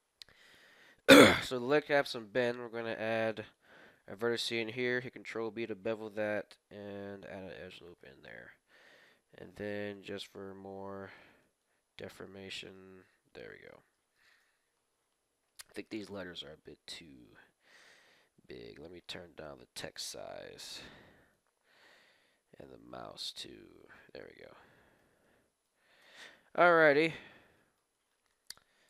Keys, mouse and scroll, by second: 0.0-0.6 scroll up 1, 0.6-2.3 middle drag, 2.0 ctrl+r, 4.8 ctrl+b, 9.0 ctrl+r, 10.6 ctrl+r, 12.1 middle click, 12.7-15.6 middle drag, 14.3 KP_1, 15.6-16.6 scroll up 1, 15.9 n, 18.8-20.4 drag, 22.4-24.0 drag, 24.5-27.0 middle drag, 26.1 KP_1, 28.3 Tab.